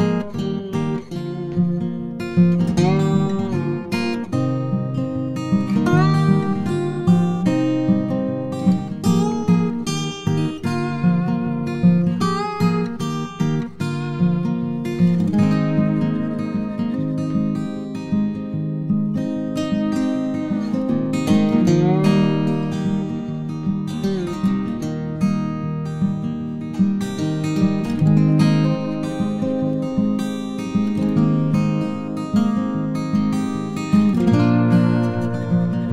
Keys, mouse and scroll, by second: 1.6 Tab, 2.3 2, 2.9 click, 3.7 Tab, 4.4 click, 5.2 shift+d, 6.7 r, 8.6 g, 15.1 shift+a, 19.1 r, 21.5 g, 23.0 g, 23.1 g, 26.0 s, 32.3 s.